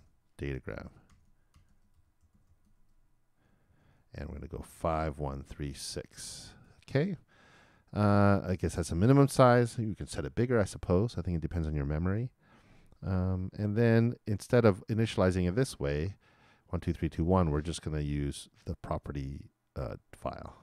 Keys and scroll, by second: 0.1-4.8 typing, 6.0-7.1 typing.